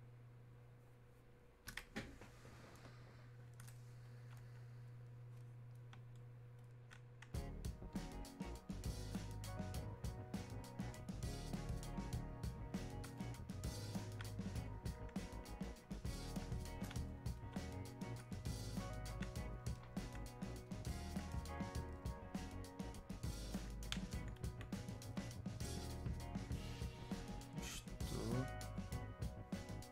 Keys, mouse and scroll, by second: 4.1-6.6 alt+drag, 9.8-26.5 drag, 28.1-29.9 drag.